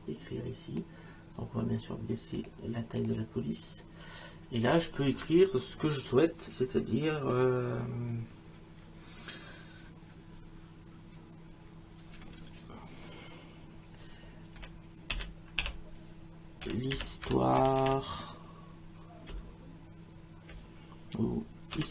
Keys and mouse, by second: 2.4 click, 14.6-19.3 typing, 21.5-21.9 typing.